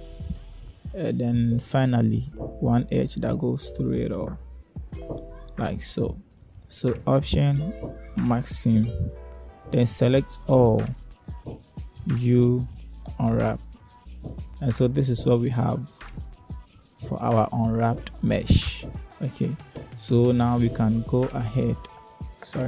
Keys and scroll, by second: 9.8 Caps_Lock, 11.3 a, 11.7 Caps_Lock, 13.1 u, 18.0 Tab.